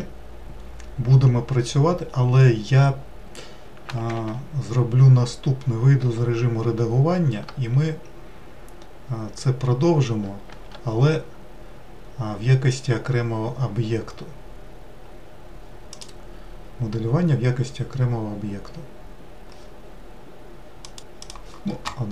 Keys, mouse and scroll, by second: 4.0 ctrl+z, 5.9 Tab, 10.3 shift+a.